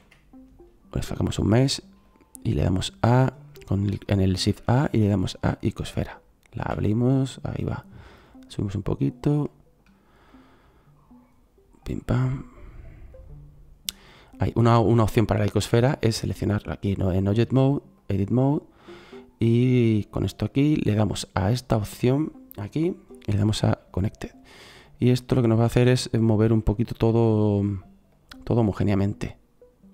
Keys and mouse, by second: 6.6 s, 9.5-10.1 middle drag, 10.2-15.8 drag, 17.0-17.5 drag.